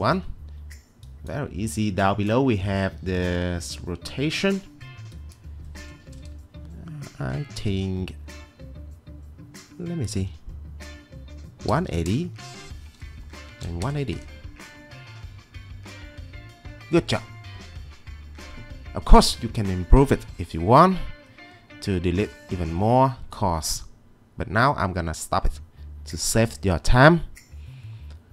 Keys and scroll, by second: 0.2 Escape, 11.7-14.2 typing.